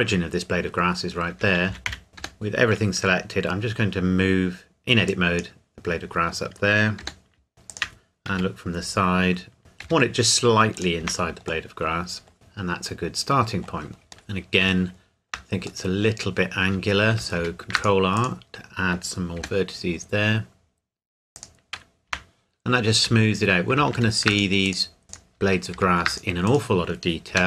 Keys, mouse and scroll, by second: 1.3 Tab, 1.7 a, 1.9 a, 2.1 a, 2.1 g, 5.1 click, 5.9 scroll up 1, 7.0 g, 7.7 shift+click, 8.3 KP_3, 9.8 g, 10.7 click, 11.0 Tab, 11.7 middle click, 12.3 scroll down 1, 12.3 middle click, 14.2-14.6 scroll up 1, 14.9 shift+middle click, 16.7 Tab, 17.3 ctrl+r, 17.7 click, 19.4 g, 19.9-21.3 scroll up 1, 21.3 click, 22.1 Tab, 23.9 ctrl+r, 24.3 click, 25.0 g, 25.3 click, 25.7 ctrl+r, 26.1 click, 27.3 g.